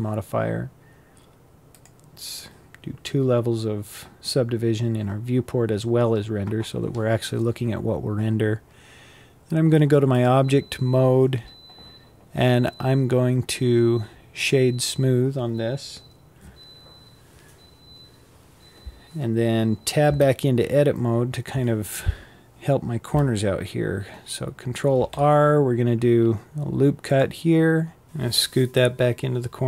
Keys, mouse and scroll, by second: 19.6 Tab, 20.3-24.4 scroll down 2, 24.4 ctrl+r.